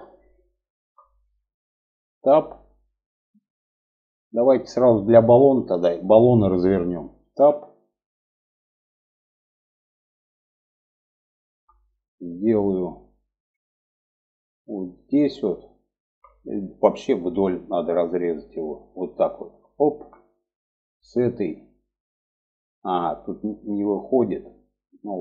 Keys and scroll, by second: 1.4 Tab, 6.6 Tab.